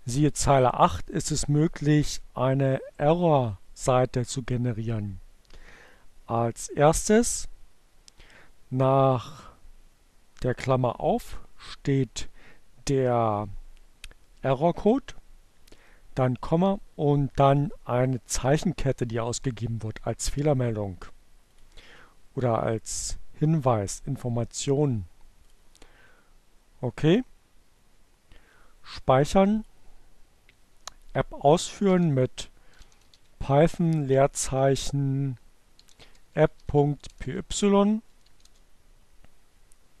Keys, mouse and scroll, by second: 5.0-7.1 drag, 19.0-21.1 drag, 22.8 click, 26.1 click, 30.3 click, 31.2 p, 32.7-34.2 typing, 35.2-37.9 typing, 38.0 Return.